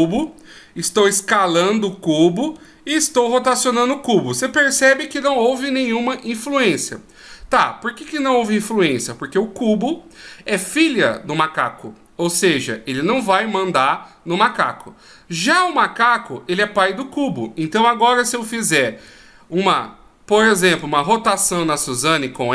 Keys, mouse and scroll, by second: 1.3 s, 3.8 r, 15.9 right click, 19.3 r.